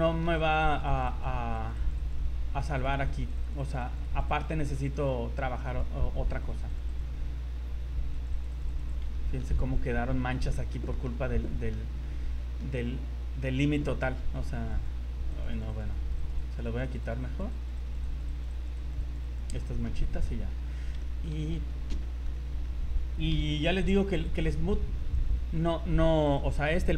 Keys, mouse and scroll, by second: 0.1 shift+middle click, 0.4 click, 0.6 click, 1.0 click, 1.2 click, 1.6 click, 1.8 click, 2.0 click, 2.3 scroll down 2, 2.7 click, 3.1 click, 3.3 click, 3.5 click, 3.7 click, 3.9 click, 4.1 click, 4.3 click, 4.5 click, 4.9 click, 5.1 click, 5.2 scroll down 4, 5.7 click, 5.9 scroll up 3, 6.3 click, 6.6 click, 6.8 click, 6.9 click, 7.4 scroll down 2, 7.6-8.1 scroll up 4, 8.1 click, 8.3 click, 8.6 click, 8.7 click, 9.1 shift+middle click, 9.5 middle click, 10.5 shift+middle click, 10.9 middle click, 11.2 scroll up 3, 11.4 middle click, 12.1 middle click, 12.3 shift+middle click, 13.9 click, 15.3 click, 15.5 click, 15.7 click, 15.9 click, 16.3 click, 16.4 click, 16.7 click, 16.8 click, 17.1 click, 17.4 click, 17.6 click, 17.8 click, 18.2 click, 18.4 click, 18.6 click, 18.8 click, 19.2 click, 19.4 click, 19.6 middle click, 19.8 scroll down 3, 20.2 middle click, 20.7 scroll up 2, 21.0 middle click, 21.6 z, 22.0 shift+middle click, 22.4 middle click, 23.3 KP_1, 23.8-24.2 scroll down 8, 24.6 scroll up 1, 25.2 right click, 26.2 click.